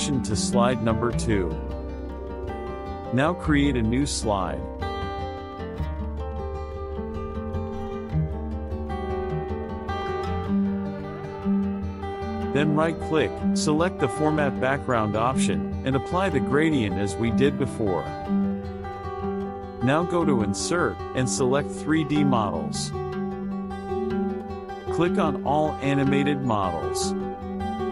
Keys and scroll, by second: 2.1 KP_Subtract, 5.7 KP_Subtract, 11.3 ctrl+a, 11.6 BackSpace, 14.0 KP_Add, 16.3 KP_Subtract, 23.7 KP_Subtract.